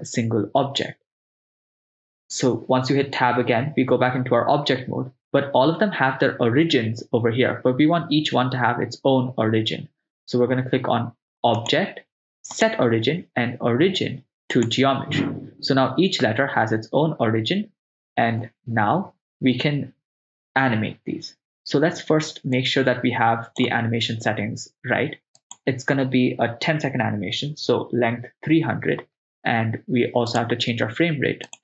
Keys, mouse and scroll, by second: 2.1 Tab, 11.6-14.7 drag, 22.6-23.6 drag, 25.4-28.5 drag, 27.9 0, 30.3 click, 31.5-31.6 drag.